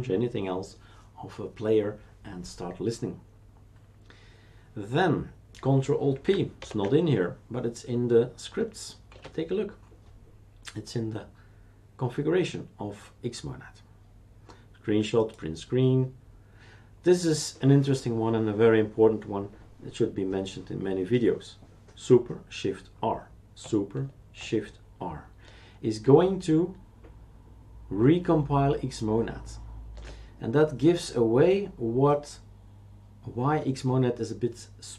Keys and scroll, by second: 6.6 ctrl+alt+p, 9.1 shift+super+q.